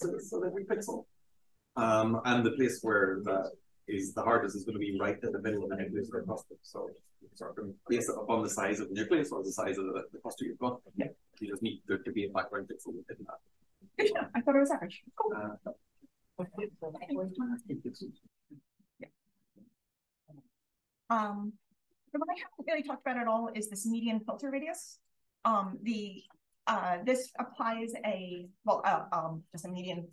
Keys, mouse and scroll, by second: 17.6 drag, 18.1 scroll up 2, 20.4-21.6 scroll up 1, 21.6 click, 23.2 click, 23.4 click, 26.4 click.